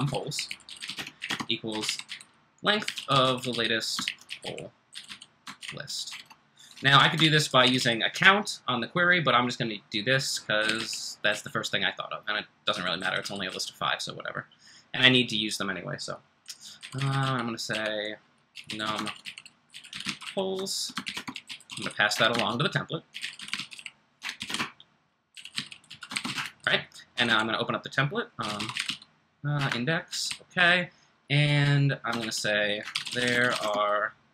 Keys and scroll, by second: 0.0-6.1 typing, 7.2-8.2 typing, 10.4-13.4 typing, 16.8-34.3 typing.